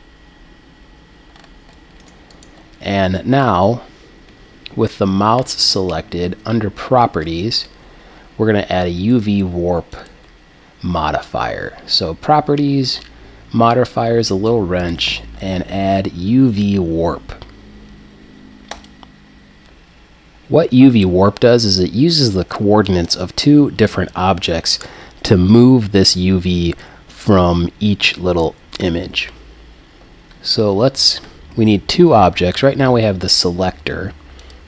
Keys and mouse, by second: 1.3-2.3 middle drag, 2.3-6.3 right drag, 9.9-13.0 drag, 14.8-18.0 drag, 34.4-34.6 drag.